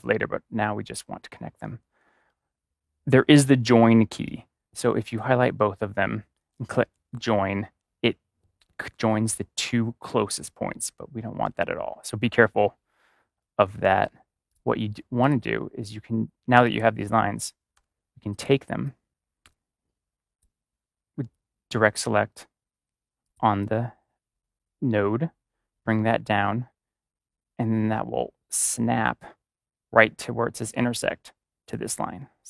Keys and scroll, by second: 6.7 ctrl+j, 11.4 ctrl+z, 17.7 a.